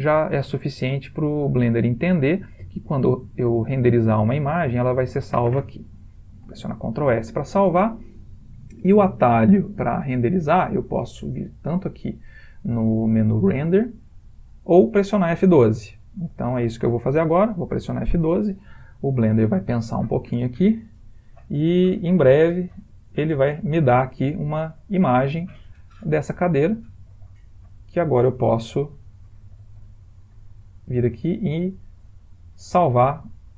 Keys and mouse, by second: 6.8 ctrl+s, 11.8 click, 16.6 click.